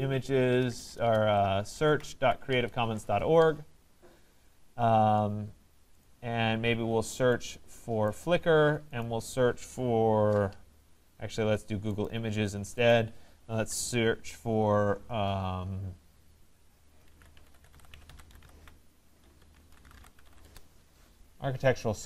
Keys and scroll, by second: 0.5 BackSpace, 2.5 Return, 20.4 Return.